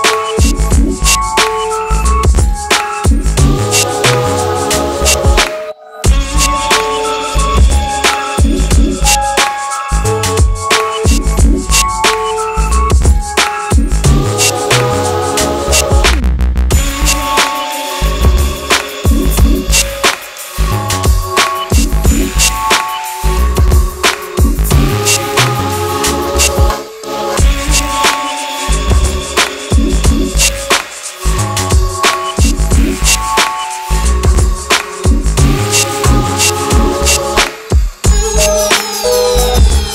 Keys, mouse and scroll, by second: 15.4 click, 15.4 click, 23.0 click, 29.0 click, 30.8-33.9 drag, 31.8-32.4 drag.